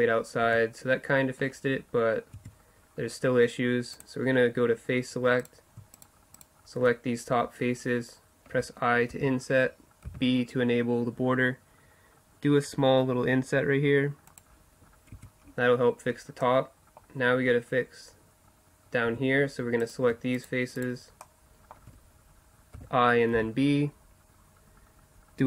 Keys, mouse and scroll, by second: 0.4 middle click, 0.4 Tab, 2.4 Tab, 2.4 middle click, 2.6-5.5 middle drag, 5.5 click, 5.8-8.8 right drag, 8.8-10.8 middle drag, 9.1 i, 15.1 Tab, 16.7-19.1 middle drag, 19.1 Tab, 19.9-22.8 middle drag, 22.8 i.